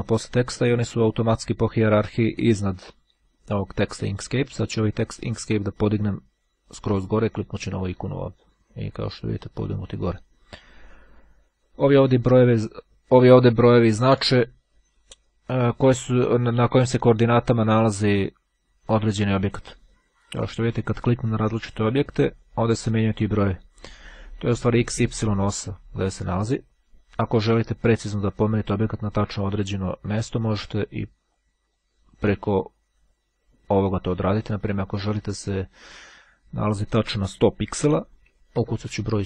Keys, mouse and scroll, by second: 8.0-9.1 drag, 10.6-11.8 drag, 20.3 click, 21.9 click, 26.0 click, 28.6-29.8 drag, 31.2-32.3 drag, 33.9 click, 36.2 click, 37.8 KP_1, 38.1 KP_Enter.